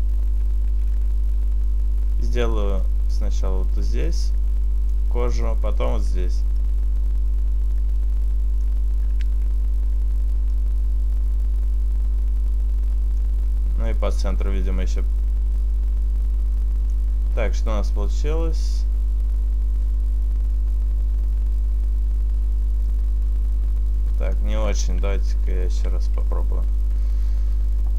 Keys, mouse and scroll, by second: 1.2 ctrl+z, 2.9 click, 6.2 click, 9.4 ctrl+z, 10.6 click, 14.3 click, 17.7 middle click, 24.9 ctrl+z, 25.4 ctrl+z, 25.9 ctrl+z, 26.8 KP_7.